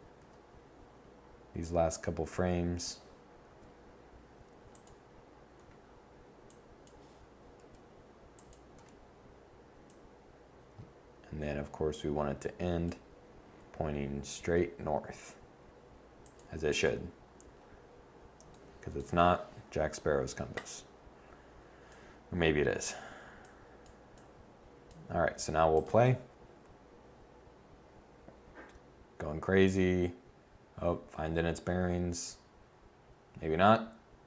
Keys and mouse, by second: 0.6 click, 3.2 r, 5.3 i, 7.2 r, 8.4 i, 14.1 r, 16.5 i, 26.9-28.4 middle drag.